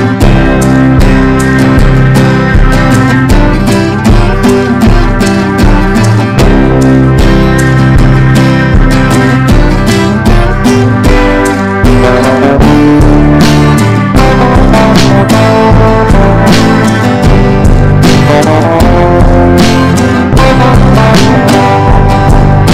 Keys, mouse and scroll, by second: 1.0 right click, 1.5-19.4 drag.